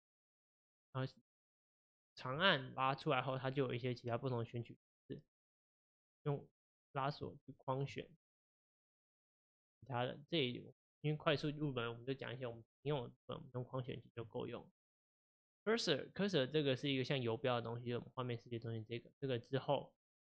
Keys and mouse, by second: 2.4-5.5 drag, 6.1-8.7 drag, 9.2-12.3 drag, 13.9 click, 14.8 click, 16.1-20.2 drag.